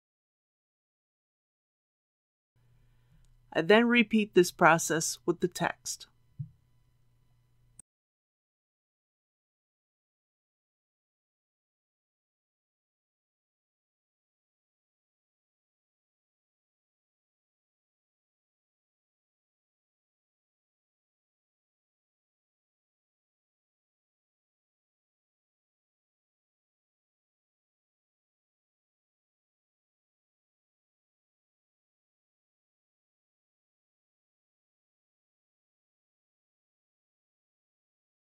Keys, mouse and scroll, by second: 0.1 middle click, 1.8 KP_3, 2.3 alt+a, 8.2 click, 14.8-16.1 typing, 15.7 click, 17.0 click, 17.2 typing, 19.3 typing, 20.3 click, 21.2 KP_1, 22.5 typing, 24.0 click, 24.7-27.2 middle drag, 27.3-28.2 typing, 29.3 click, 29.7 KP_3, 31.7-37.2 drag.